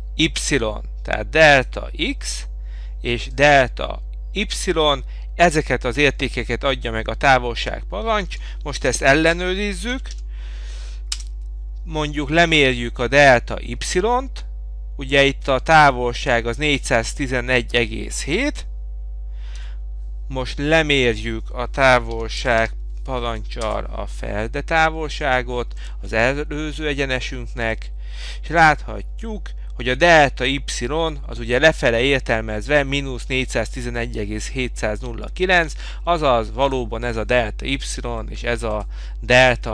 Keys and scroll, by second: 8.4 Escape, 11.2 Return, 19.6 F8, 23.7 Return, 38.2 Escape.